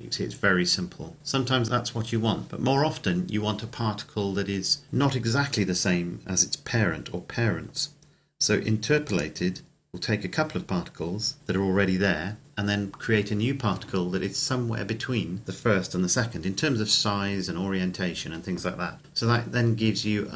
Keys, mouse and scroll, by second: 9.1 click.